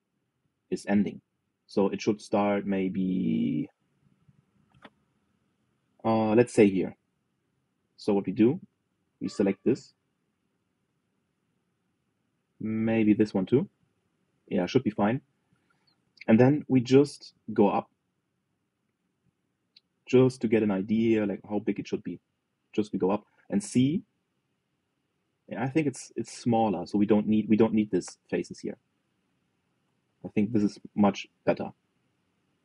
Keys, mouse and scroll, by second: 0.0-1.1 middle drag, 1.1 click, 1.7 Tab, 3.3-8.7 middle drag, 8.7 click, 9.8 shift+click, 10.1 shift+click, 10.3 shift+click, 10.7 shift+click, 11.2 shift+click, 11.6 shift+click, 11.8 shift+click, 12.1 middle click, 12.7 scroll down 2, 12.9 middle click, 14.1 shift+click, 14.4-15.9 middle drag, 15.9 scroll down 1, 16.2-16.6 scroll up 1, 16.6-18.6 shift+middle drag, 18.6 e, 22.1 middle click, 22.4 scroll down 1, 22.6-24.7 middle drag, 27.2-28.6 middle drag, 28.6 ctrl+z, 29.1 middle click, 29.4-29.9 scroll up 2, 29.9 shift+click, 30.4 shift+click, 30.6 middle click, 31.4 e.